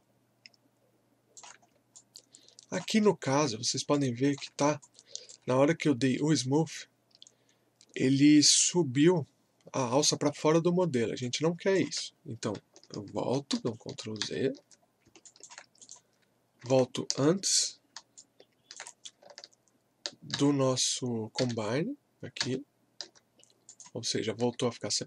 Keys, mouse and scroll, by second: 1.6 scroll up 1, 2.0 alt+click, 3.1 alt+middle click, 3.5 scroll up 1, 3.9-5.8 alt+drag, 5.2 typing, 5.8 scroll up 1, 6.2 alt+middle click, 9.7 scroll down 1, 9.7 typing, 11.2-13.5 alt+drag, 13.5 ctrl+z, 14.8 scroll up 1, 15.2 alt+click, 18.2-20.3 alt+drag, 20.3 ctrl+z, 23.7 click, 24.4 w.